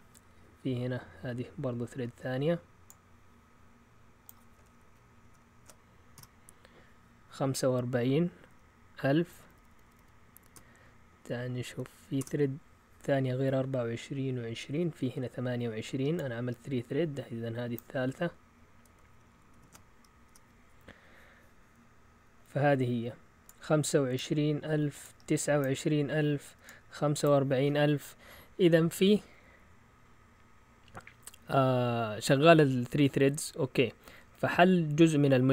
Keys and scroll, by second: 5.2 ctrl+shift+Insert, 6.1 Return, 8.4 Up, 9.0 Left, 9.2 Left, 9.4 Left, 9.5 Left, 9.7 Left, 9.8 Left, 9.9 Left, 10.5 BackSpace, 11.1 BackSpace, 11.2 BackSpace, 11.7 BackSpace, 19.5 ctrl+shift+Insert, 20.2 Return, 34.4 Up.